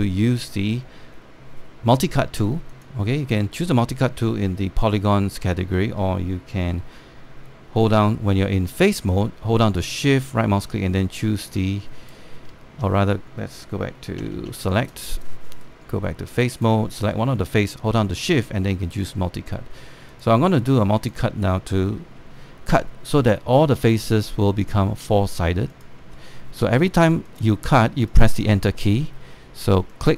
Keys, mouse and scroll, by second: 0.0 alt+middle click, 0.5-2.5 scroll up 1, 3.4 click, 8.9 right click, 10.5-13.2 shift+right drag, 14.9 shift+q, 15.4 right click, 15.6 click, 16.3 right click, 17.2 click, 18.2-20.8 shift+right drag, 20.8 click, 22.9 Return, 25.3 click, 26.7 Return, 28.0 click, 29.0 Return.